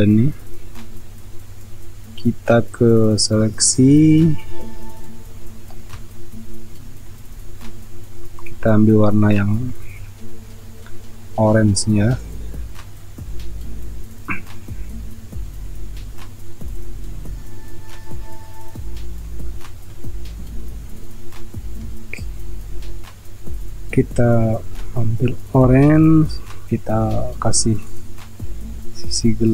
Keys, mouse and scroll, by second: 5.9 ctrl+space, 7.7 space, 25.6 alt+Delete.